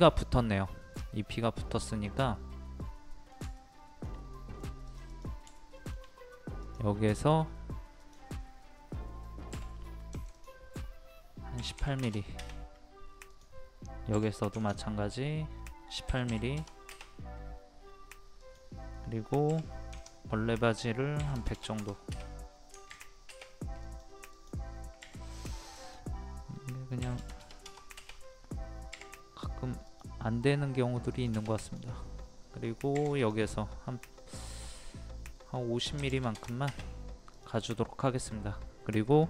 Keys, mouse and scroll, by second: 1.0 scroll down 1, 1.6 scroll up 1, 2.1-3.4 middle drag, 3.6 shift+middle click, 4.3 middle click, 4.8 click, 5.4 scroll up 1, 5.8 shift+middle click, 6.6 click, 7.1 scroll up 1, 8.0 click, 9.5 m, 10.3 click, 11.6 KP_1, 13.3 click, 14.6 ctrl+click, 16.1 KP_1, 18.4 click, 19.5 m, 19.9 ctrl+click, 21.2 KP_1, 23.8 click, 27.0 KP_1, 29.9 click, 32.9 p, 33.2 click, 36.0 KP_5, 37.3 click, 38.2 middle click.